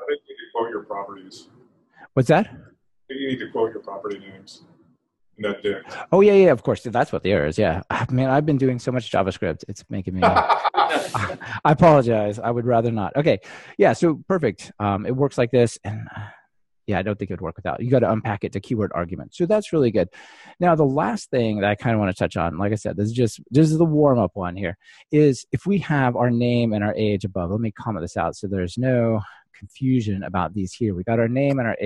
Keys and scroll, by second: 12.9 ctrl+r, 29.6 super+/.